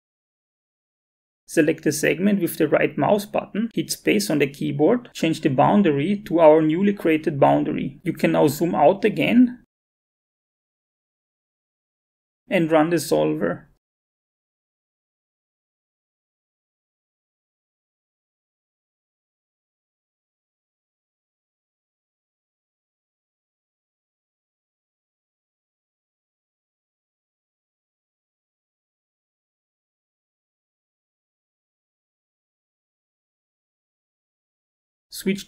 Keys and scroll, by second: 4.3 space.